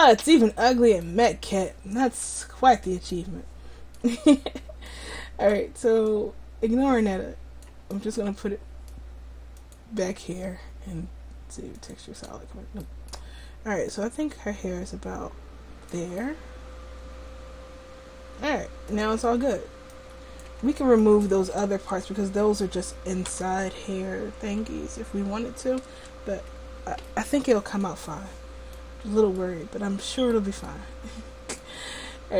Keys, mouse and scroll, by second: 3.4 middle click, 8.1-9.7 middle drag, 9.7-11.9 scroll up 1, 11.9-16.0 drag, 12.9-14.7 middle drag, 12.9-14.7 right drag, 16.3 middle click, 19.9-21.1 drag, 21.8 Tab, 23.4 a, 24.7 l, 26.2 Tab, 31.6-32.3 drag.